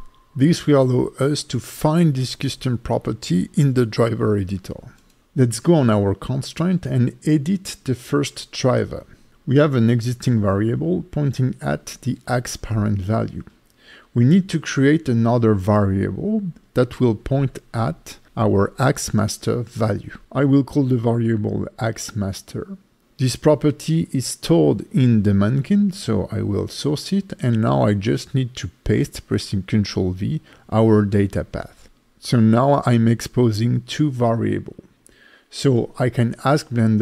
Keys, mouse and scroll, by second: 3.3 click, 3.6 click, 5.3 click, 6.3 right click.